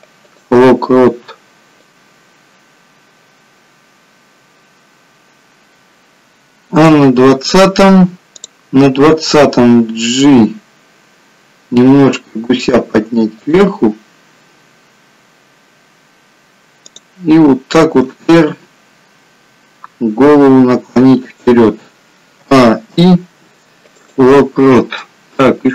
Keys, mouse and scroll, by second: 2.1 click, 8.5 click, 10.7 g, 17.0 click, 18.3 r, 22.5 a, 23.0 i, 25.6 click.